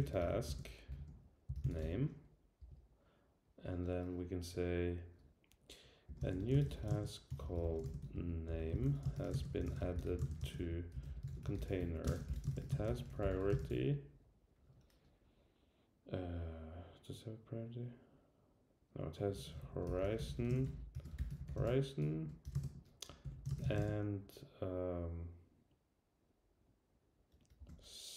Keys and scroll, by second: 2.6 Return, 19.6 alt+shift+Left.